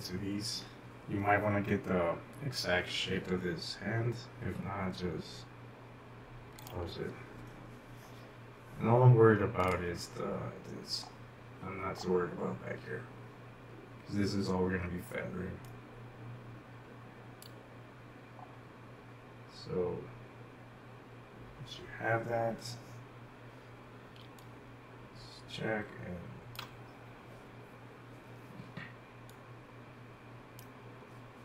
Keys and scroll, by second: 24.3-26.5 typing.